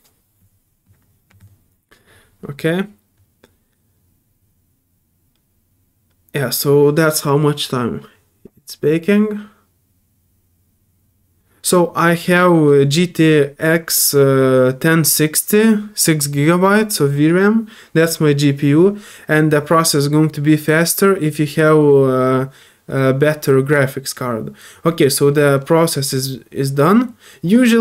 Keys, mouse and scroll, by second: 24.2 scroll down 1, 25.4 scroll up 1, 25.9 scroll down 1, 26.6 scroll up 1.